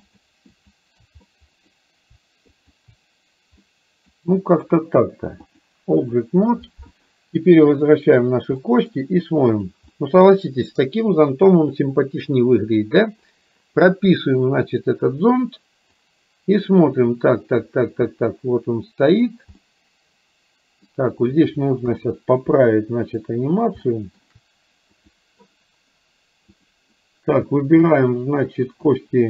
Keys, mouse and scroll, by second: 0.2 shift+click, 0.5 shift+click, 1.3 middle click, 2.7 shift+click, 3.7 middle click, 5.5 click, 7.8 click, 8.7 middle click, 9.7 click, 9.9-12.8 middle drag, 14.8 click, 16.0-19.3 drag, 19.7-20.9 middle drag, 21.9 KP_3, 23.9 shift+middle click, 25.0 click, 26.5 click, 28.9 click.